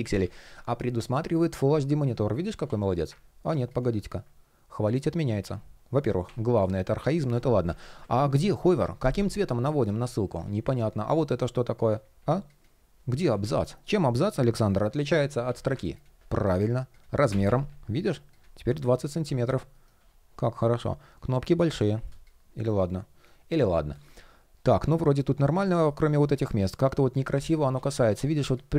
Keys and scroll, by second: 10.6 shift+3, 12.9 super+r, 14.2 super+\, 16.9 shift+Up, 18.3 super+\, 19.4 shift+p, 25.5 shift+p, 27.4 super+z.